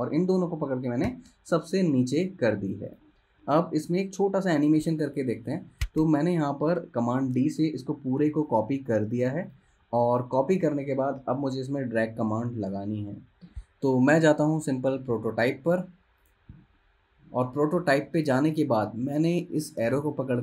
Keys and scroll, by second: 1.2 shift+super+[, 7.4 super+d, 8.4 space.